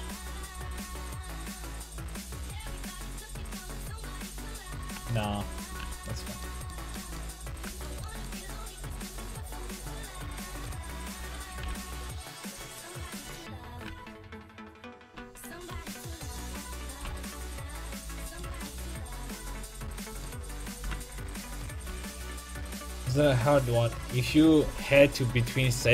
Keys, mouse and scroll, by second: 2.7 s, 5.1 ctrl+z, 5.3 ctrl+z, 5.8 a, 10.3 right click, 11.6 g, 13.8 g, 15.5 click, 15.7 a, 16.4 click, 16.4 right click, 17.0 g, 18.4 a, 19.4-21.8 right drag, 20.8 g, 21.9 a.